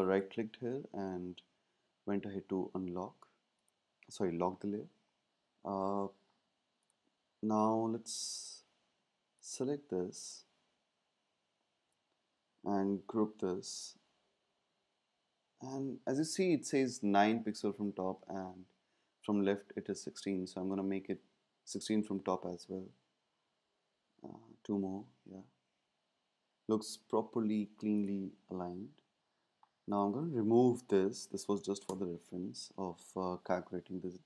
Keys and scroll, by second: 13.1 super+g, 21.8 Down, 22.0 Down, 24.2 Down, 31.9 BackSpace.